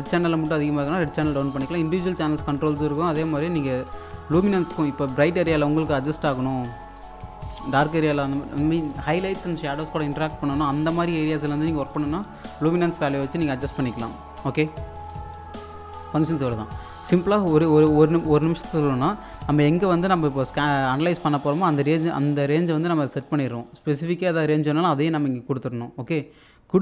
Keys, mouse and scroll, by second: 2.6-3.4 scroll down 1, 3.4-3.8 scroll up 1, 5.0-5.4 scroll down 1, 5.4-14.5 alt+drag, 14.5 click, 20.0 scroll down 1, 20.3 alt+click, 24.2-26.8 drag.